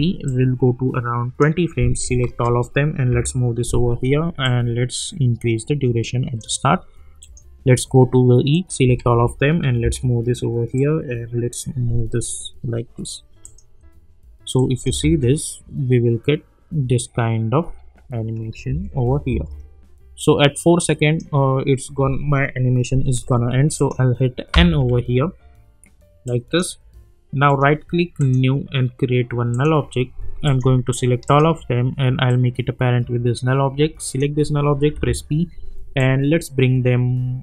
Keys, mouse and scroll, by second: 2.2 ctrl+a, 3.1 [, 4.4 click, 8.5 click, 9.0 ctrl+a, 9.8 [, 10.7-13.4 drag, 14.8 space, 18.6 space, 20.2-23.6 drag, 23.7 click, 24.5 n, 26.2 click, 27.5 right click, 28.2 click, 31.2 shift+click, 32.3-34.0 drag, 34.9 p, 36.0-37.4 drag.